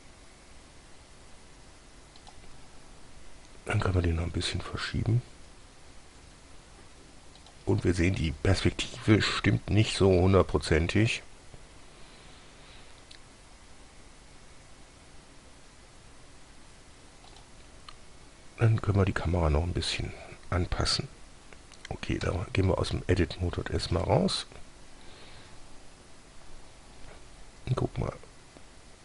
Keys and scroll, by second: 3.6 g, 10.1 s, 22.5 Tab, 27.4 g.